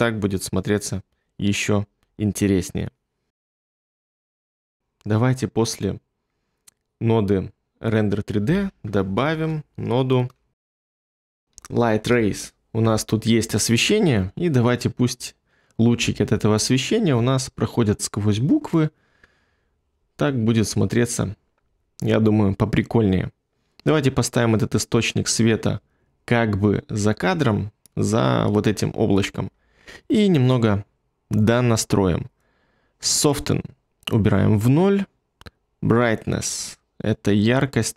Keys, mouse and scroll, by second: 9.2 space, 10.5-11.8 typing, 12.0 Return, 16.4 ctrl+middle click.